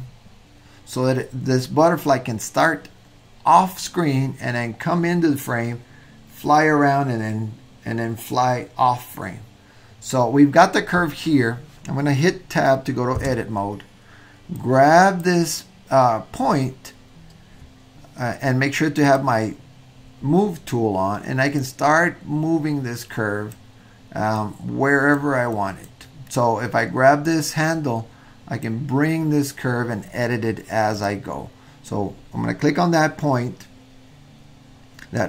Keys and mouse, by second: 13.2 Tab, 14.7 drag, 19.1 click, 21.6-23.5 drag, 24.4-25.3 drag, 25.5-26.0 drag, 27.2-28.8 drag.